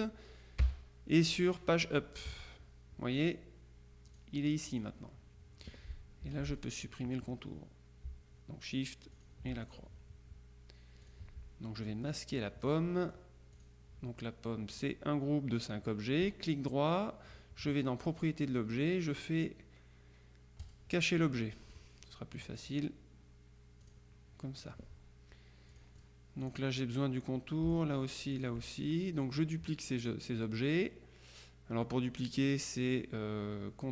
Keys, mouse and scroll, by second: 0.7 shift+Page_Up, 4.2 click, 5.1 click, 6.3 F2, 6.6 click, 9.2-10.3 shift+drag, 11.1 click, 12.5-13.7 drag, 16.4 right click, 18.1 click, 20.7 click, 22.4 click, 23.9 click, 25.8-27.1 drag, 27.8 shift+click, 28.8 click.